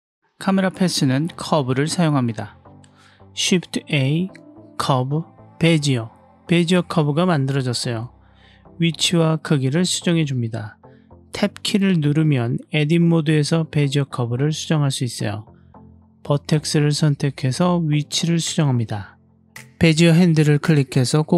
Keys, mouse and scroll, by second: 3.1 shift+a, 7.7 g, 8.6-9.5 drag, 9.5 s, 10.8 click, 11.2 click, 11.9 Tab, 13.4 click, 14.0 click, 14.4 g, 16.7-17.9 drag, 18.6 g, 19.1 click, 20.3 click, 21.2 click.